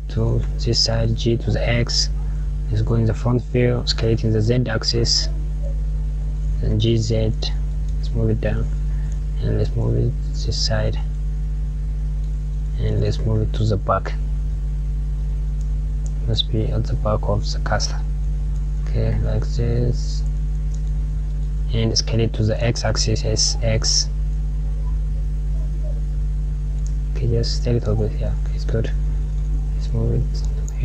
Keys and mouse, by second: 1.9 KP_1.